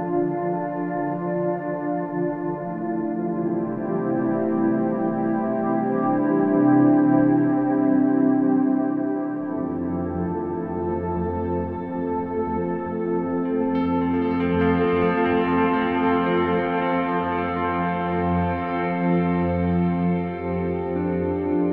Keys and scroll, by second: 4.1 space, 10.2 space, 12.8 space, 15.2 space, 20.8 space.